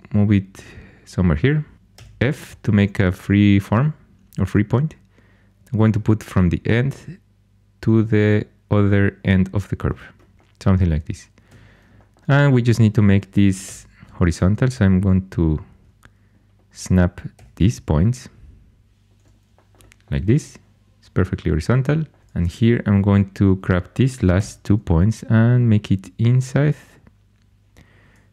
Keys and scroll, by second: 1.9 f, 11.4 1, 13.6 g, 17.3 g, 24.3 g.